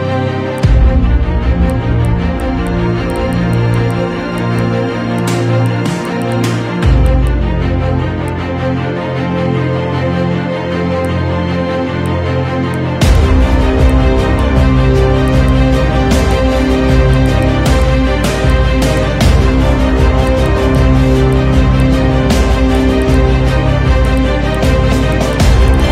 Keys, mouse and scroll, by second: 0.6 click, 1.7 click, 2.0 click, 2.6 click, 3.5 click, 3.5 right click, 3.9 drag, 4.2 ctrl+2, 4.2 KP_1, 4.4 click, 5.0 ctrl+2, 5.0 scroll down 1, 5.2 click, 5.5 scroll up 3, 5.6 click, 6.2 click, 6.4 Tab, 7.0 2, 7.0 alt+click, 7.2 alt+shift+click, 7.9 i, 8.4 Tab, 9.0-11.0 scroll down 1, 11.0 click, 11.5 Tab, 12.0 ctrl+r, 13.0 Tab, 13.2 click, 13.4 Tab, 14.0 ctrl+r, 14.8-15.2 scroll down 4, 14.8 KP_1, 15.2 Tab, 15.2 click, 15.8 click, 15.8 scroll up 2, 15.8 shift+d, 16.6 shift+d, 17.2 click, 17.4 click, 17.7 scroll up 1, 17.8 click, 18.5 click, 18.5 KP_1, 18.6-19.0 scroll down 1, 19.0-20.3 drag, 20.4 click, 20.6 scroll up 2, 20.8 click, 21.1 KP_Divide, 21.3 click, 21.8 click, 22.7 click, 23.6 click, 23.6 KP_1, 23.8-24.2 scroll down 1, 24.2 ctrl+a, 24.2 click, 24.6 click, 25.1 click, 25.6 click.